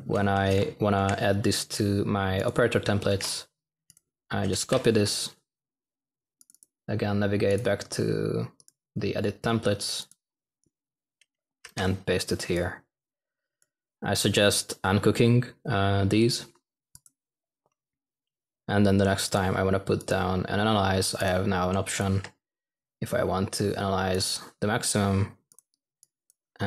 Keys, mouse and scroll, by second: 10.1 c, 12.6 v, 18.5 typing.